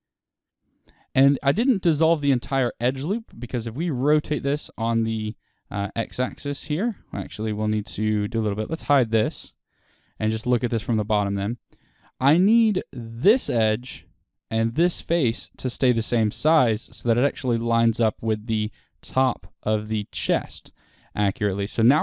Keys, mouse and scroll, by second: 0.2 x, 0.6-9.3 middle drag, 2.3 Tab, 3.4 r, 7.3-7.6 scroll down 2, 8.4 click, 9.3 h, 10.2 middle click, 10.2 click, 10.4 Tab, 10.6-21.5 middle drag, 11.3-11.6 scroll up 2, 21.5 alt+click.